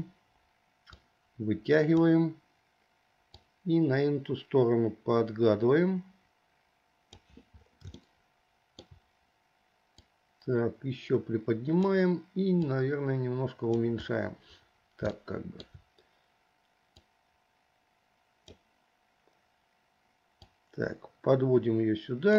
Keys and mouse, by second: 1.3-2.4 drag, 3.7-7.5 drag, 8.3 shift+middle click, 10.4-12.2 drag, 13.0-14.0 drag, 15.4 shift+middle click, 17.3-18.9 drag, 20.7-22.3 drag.